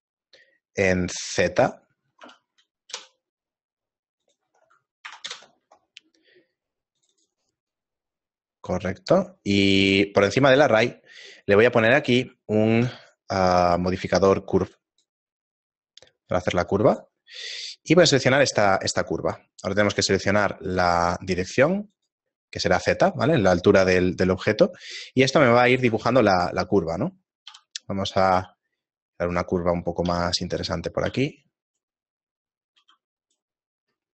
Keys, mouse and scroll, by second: 0.9-7.8 click, 7.8 middle click, 8.1-8.6 scroll down 2, 8.6 middle click, 10.3 click, 10.6 click, 16.9 click, 20.8 click, 22.0 click, 23.6 shift+middle click, 25.4 right click, 25.9 Tab, 26.3 right click, 26.7 middle click, 27.5 KP_7, 28.4 e, 29.7 middle click, 30.3 g, 31.0 r, 32.4 right click, 32.8 r.